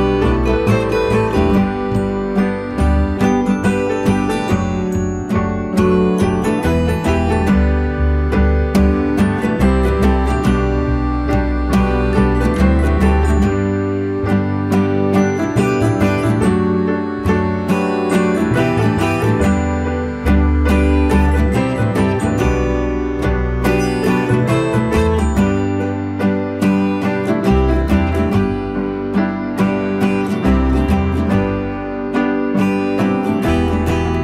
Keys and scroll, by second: 10.2 Return.